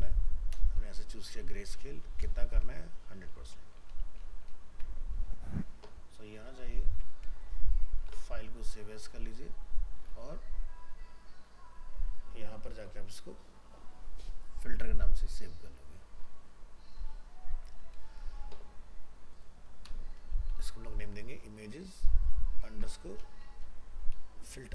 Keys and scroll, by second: 4.7 ctrl+s, 7.8 alt+f, 7.9 alt+移, 22.7 ctrl+shift+Left.